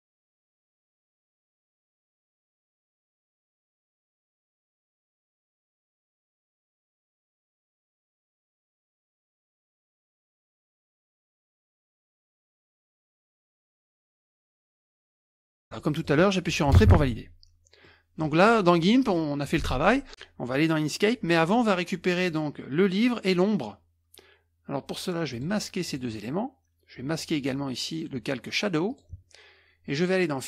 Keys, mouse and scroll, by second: 1.7-4.6 drag, 5.0-5.7 ctrl+scroll up 1, 6.9-8.2 drag, 8.2 middle click, 9.7-11.1 middle drag, 11.6-12.3 ctrl+scroll up 2, 12.5-13.8 drag, 13.8 middle click, 13.9-15.0 drag, 15.2-15.8 ctrl+scroll down 2, 15.8 middle click, 16.8 Return, 17.8 middle click, 25.3-26.5 drag, 28.9 click.